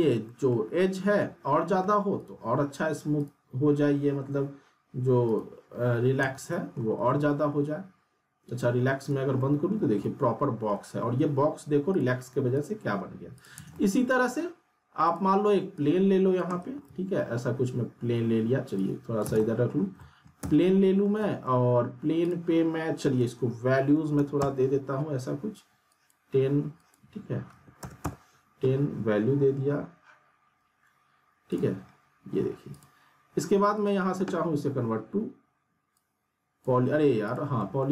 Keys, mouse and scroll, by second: 0.5 middle click, 2.2 click, 4.3 scroll down 1, 5.2 click, 6.2 z, 6.5 alt+middle click, 6.9 scroll down 1, 7.1 alt+middle click, 9.0 click, 9.4 alt+middle click, 9.8 scroll down 1, 10.0-11.0 alt+middle drag, 11.9 click, 13.5 z, 13.7-14.4 alt+middle drag, 15.0 click, 16.5 right click, 16.6 w, 16.8 middle click, 17.3 scroll down 1, 18.8-19.7 click, 19.2 z, 19.4 middle click, 19.8 scroll down 1, 20.0 alt+middle click, 20.4 z, 20.6-21.5 alt+middle click, 21.0 scroll down 1, 21.2 alt+middle click, 22.2 click, 25.9 click, 31.5 click, 33.8 right click, 35.9-36.9 drag, 37.6 alt+middle click.